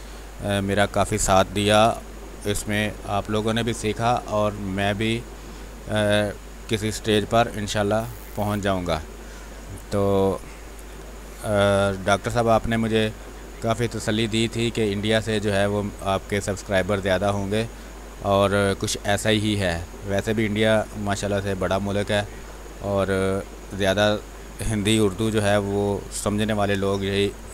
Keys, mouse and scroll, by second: 1.9 space, 2.1 ctrl+click, 2.8-5.9 drag, 6.0 space, 6.8-9.9 drag, 9.9 space, 10.1 click, 11.8 b, 12.4 space, 12.6-21.1 ctrl+drag, 21.1 space, 21.3 click, 21.6 space, 22.7 x, 23.1-24.5 drag, 24.5 space, 24.7 click, 25.0 space, 25.2 r, 25.4 click, 26.3 b, 26.7 space, 26.8 click, 27.2 space.